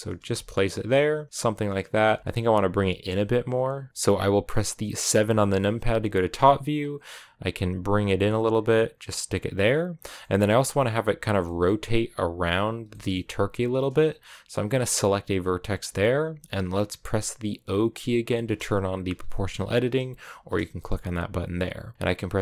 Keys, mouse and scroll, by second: 0.0 Tab, 0.1 scroll down 1, 0.3-2.0 middle drag, 2.0 Tab, 4.9 KP_7, 6.5-7.7 scroll up 3, 7.7 g, 10.0 shift+middle click, 10.2-11.3 scroll up 1, 11.3-14.6 shift+middle drag, 14.6-19.3 right drag, 19.3 o, 22.1 g.